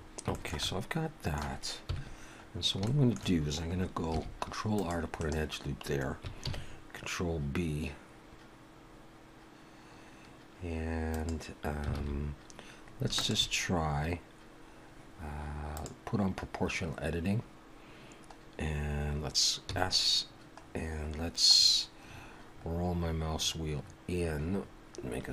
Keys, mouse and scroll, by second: 0.3 shift+middle click, 0.6 middle click, 1.9 KP_1, 2.5-2.8 scroll up 2, 2.8 shift+middle click, 4.1 ctrl+r, 6.4 ctrl+b, 12.0 alt+a, 13.2 alt+shift+click, 15.7 click, 18.7-19.6 scroll down 3, 19.6 s.